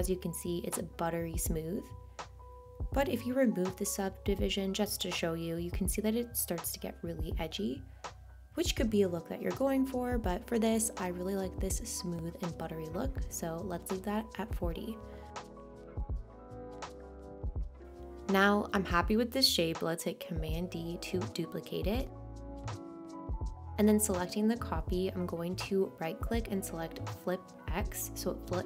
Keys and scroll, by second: 23.3 super+d.